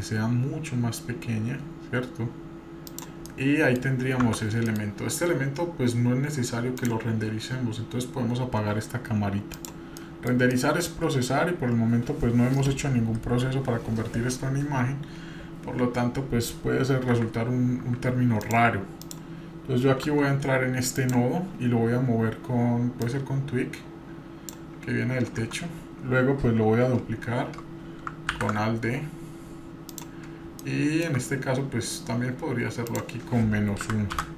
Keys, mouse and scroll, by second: 0.0 s, 3.3 middle click, 4.3 Tab, 4.7 middle click, 6.8 click, 9.5 click, 10.0 middle click, 10.5-11.0 shift+middle drag, 13.2 KP_3, 14.4 scroll down 2, 15.0-16.0 scroll up 1, 16.1 scroll up 1, 17.1 a, 17.5-17.8 scroll up 1, 18.4 drag, 18.4 a, 19.0 click, 20.0 Tab, 20.9 click, 23.0-24.6 drag, 24.9-25.3 scroll down 1, 25.4 Tab, 28.3 alt+d, 30.6-31.2 shift+middle drag, 32.9-34.3 drag.